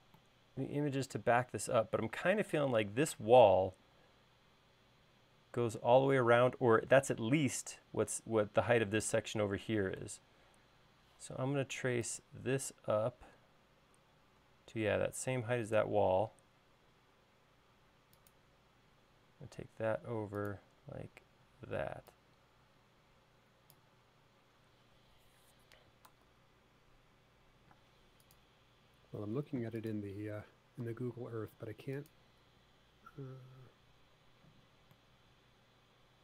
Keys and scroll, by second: 10.9 l, 21.6 e, 26.6 super+z, 28.2 space, 31.2 super+v.